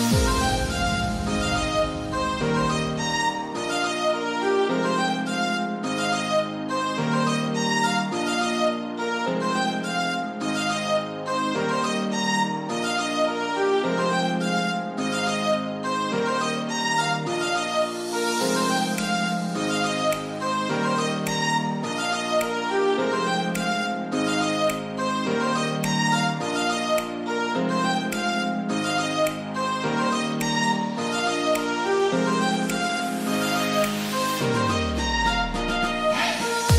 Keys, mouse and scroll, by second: 0.2 click, 0.3 click, 1.0-10.6 drag, 11.6-26.4 drag, 26.4-27.0 scroll down 1, 27.0-28.9 scroll up 1, 29.3-33.8 drag, 33.8 ctrl+z, 35.1 click, 35.8 scroll down 1, 36.6-36.7 scroll up 1.